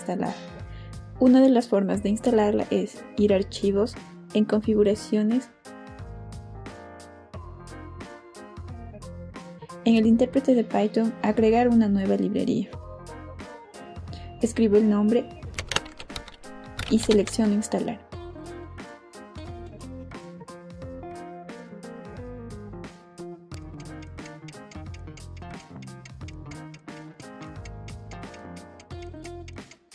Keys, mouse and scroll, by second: 5.3 click, 10.0 click, 11.1 click, 13.3 click, 16.2-18.0 typing, 21.1 click, 23.1 click.